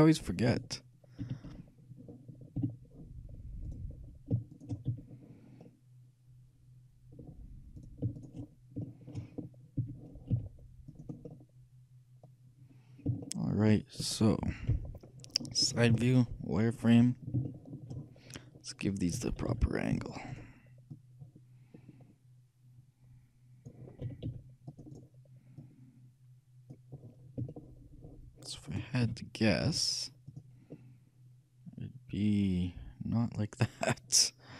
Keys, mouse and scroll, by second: 0.6 t, 1.3 t, 1.6 n, 2.7 f, 3.7-6.5 right drag, 5.1 f, 5.7-7.8 middle drag, 7.8-8.9 shift+right drag, 8.5 shift+middle click, 9.9 f, 10.4 z, 10.8 click, 14.8 KP_3, 16.0 z, 19.2 shift+a, 19.6 c, 21.0-22.8 drag, 24.2 a, 24.5 c, 25.1-26.7 right drag, 25.7-27.6 drag, 27.1 middle click, 27.8-29.2 shift+middle drag, 29.2 shift+a, 29.8 z, 31.7 middle click.